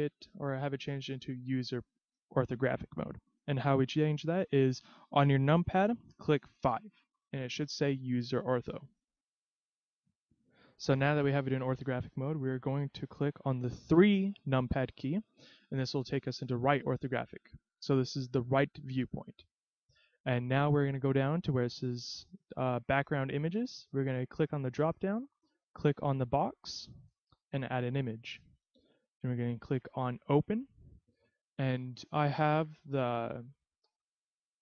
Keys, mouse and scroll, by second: 6.7 KP_5, 7.3 right click, 10.0 middle click, 14.9 KP_3, 19.2 scroll up 3, 24.6 click, 26.2 click, 27.5 click.